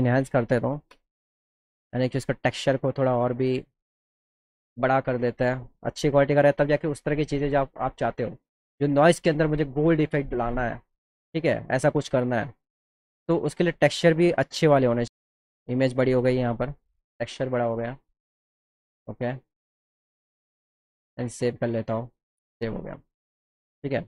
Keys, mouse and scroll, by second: 2.0 click, 8.5 click, 20.7 click, 22.0 click.